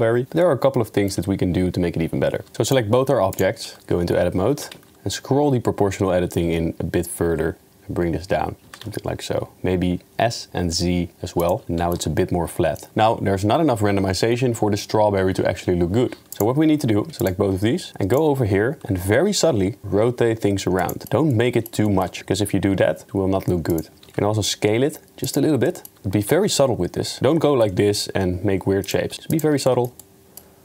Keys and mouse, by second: 0.0 middle click, 0.4-1.1 middle drag, 2.7 click, 3.3 ctrl+click, 3.8 Tab, 4.6 g, 8.7 s, 11.6-12.0 middle drag, 12.1 Tab, 16.3 click, 17.2 ctrl+click, 17.9 Tab, 19.8 r, 21.0 shift+middle click, 21.4 middle click, 21.9 shift+middle click, 22.9 r, 24.1 s, 25.8 shift+middle click, 26.3 s, 29.2 s, 29.7 shift+middle click.